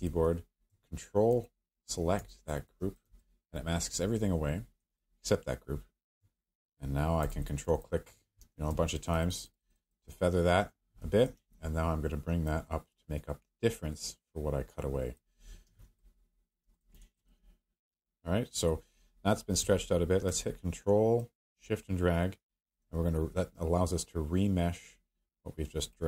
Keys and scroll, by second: 8.4 q, 11.0 w, 15.6 q.